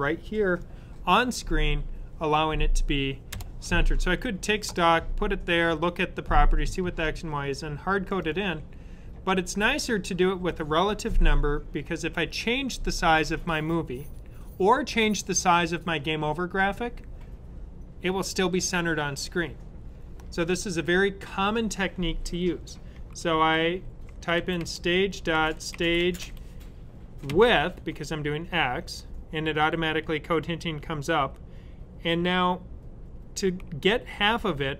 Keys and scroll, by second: 22.8-27.1 typing.